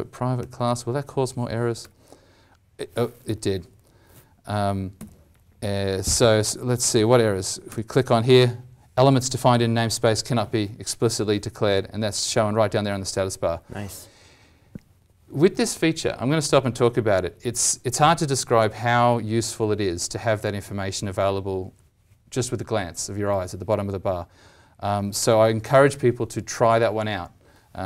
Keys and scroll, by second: 1.7 ctrl+z, 4.9 ctrl+y.